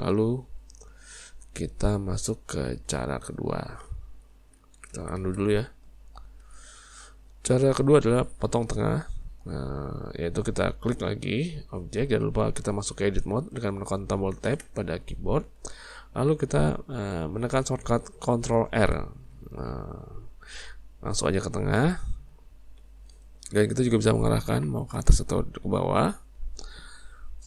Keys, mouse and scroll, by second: 1.5-2.9 middle drag, 2.9 Tab, 3.6-4.6 shift+middle drag, 4.6 ctrl+z, 5.0 ctrl+z, 5.2 ctrl+z, 6.4 alt+a, 6.9-10.0 middle drag, 11.6 click, 14.5 Tab, 18.8 ctrl+r.